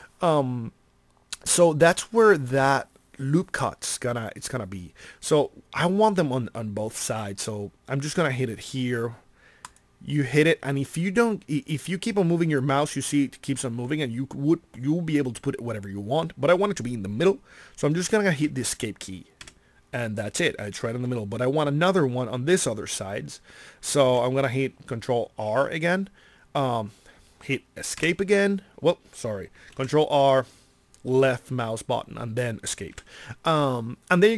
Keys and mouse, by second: 24.0 ctrl+r, 29.7 ctrl+r.